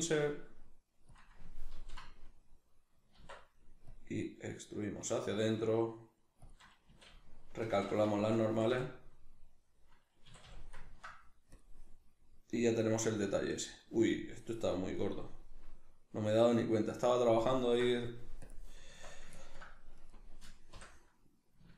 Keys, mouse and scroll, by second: 1.2 click, 1.7 ctrl+l, 3.2 alt+e, 6.5 shift+click, 6.9 a, 7.8 shift+n, 8.2-11.5 shift+middle drag, 8.5 a, 10.3 a, 11.5 click, 11.9-18.5 middle drag, 18.5 click, 18.9 Tab, 19.3 ctrl+middle click, 20.0 right click, 20.7 l.